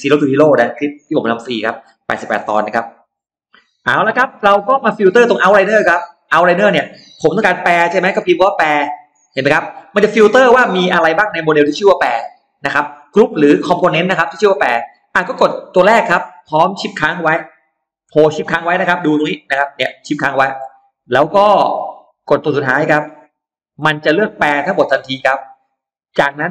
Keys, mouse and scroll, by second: 3.5 middle click, 3.5 scroll up 1, 5.9 click, 8.1 c, 9.1 x, 15.5 click, 21.3 shift+middle click, 23.1 shift+click, 24.2-24.9 scroll up 2, 25.5 middle click.